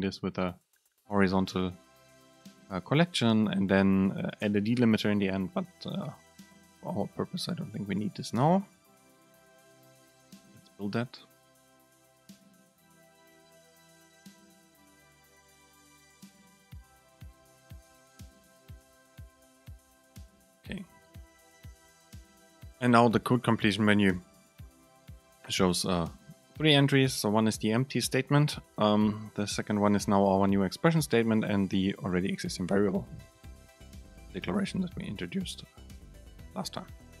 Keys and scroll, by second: 22.7 super+space.